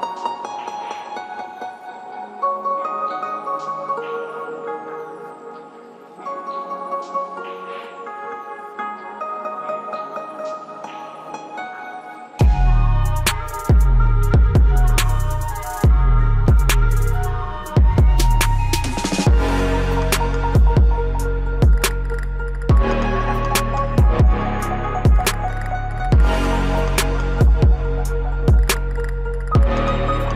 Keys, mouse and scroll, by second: 0.3 scroll up 1, 4.1-12.2 drag, 12.6-14.1 alt+drag, 14.1-20.6 drag, 22.1 click, 23.1 F4, 24.9 scroll down 1, 25.8-30.3 drag, 29.0 typing.